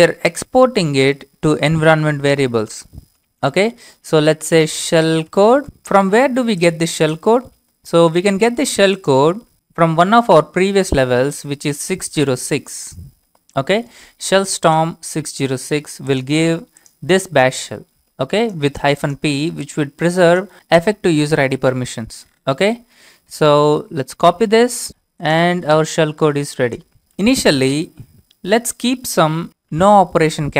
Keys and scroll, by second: 0.0-0.4 typing, 4.4-6.1 typing, 10.3-11.3 typing, 24.9 BackSpace, 29.1-30.3 typing.